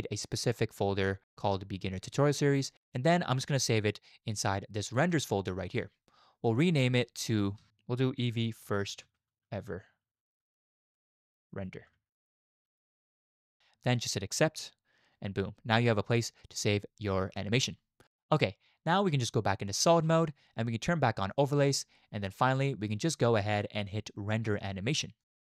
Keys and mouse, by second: 19.1 z, 21.3 click, 23.7-25.4 drag.